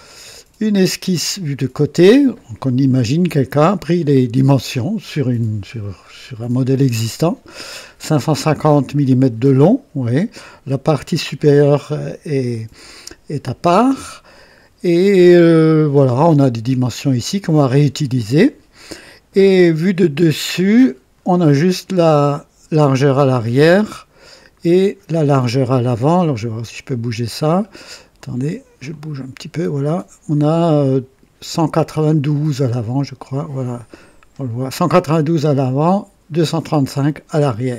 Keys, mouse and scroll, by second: 20.5 click, 24.1 scroll down 2, 26.3-27.7 middle drag, 28.9-32.3 drag, 32.8-36.9 middle drag.